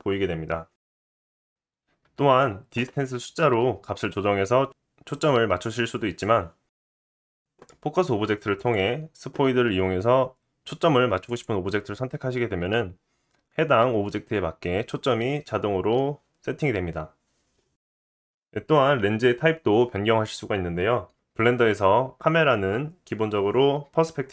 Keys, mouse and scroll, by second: 1.5-3.2 middle drag, 3.2-8.7 drag, 8.7-24.3 middle drag.